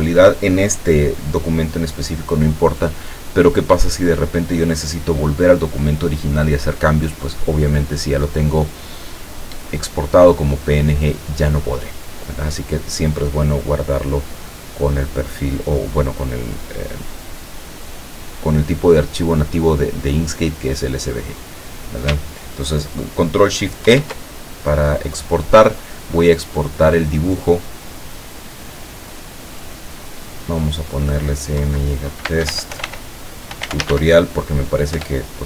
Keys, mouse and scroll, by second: 23.9 ctrl+shift+e, 30.0 click, 31.7 Right, 32.3-34.5 typing, 35.0 Return.